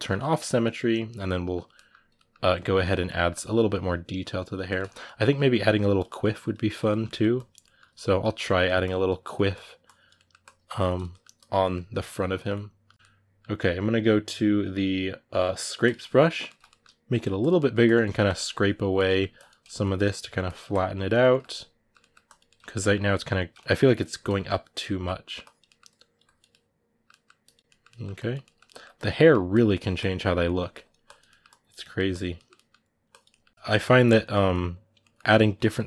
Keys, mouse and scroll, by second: 2.7 ctrl+click, 2.9 ctrl+middle click, 3.1-4.7 ctrl+drag, 4.7-5.7 middle drag, 5.7 click, 5.8 middle click, 6.2 click, 6.7 ctrl+middle click, 7.1 click, 7.4 ctrl+middle click, 8.0 click, 8.2 shift+middle click, 8.6 click, 9.1 ctrl+middle click, 9.3 click, 9.9 middle click, 10.2 click, 10.9 middle click, 11.1 click, 11.4-15.6 middle drag, 15.6 click, 16.0 ctrl+middle click, 16.9 f, 17.3 middle click, 17.6 click, 17.8 ctrl+middle click, 18.0 click, 18.8 middle click, 19.1 ctrl+click, 19.4 ctrl+middle click, 19.8 click, 20.0 ctrl+middle click, 20.2 click, 21.1 ctrl+middle click, 22.0 click, 22.2-24.0 ctrl+middle drag, 24.0 click, 25.0 middle click, 25.2 click, 25.4 middle click, 25.7 click, 26.3 middle click, 27.2 click, 27.4 middle click, 27.9 click, 28.2 ctrl+middle click, 28.7 click, 28.9 middle click, 29.3 click, 30.0 ctrl+middle click, 30.5 click, 31.0 middle click, 31.2 click, 31.6 middle click, 31.9 click, 32.1 middle click, 32.8 click, 33.0 middle click, 33.8 click, 34.1 middle click, 34.5 click, 34.8 middle click, 35.1 click, 35.4 middle click, 35.7 click.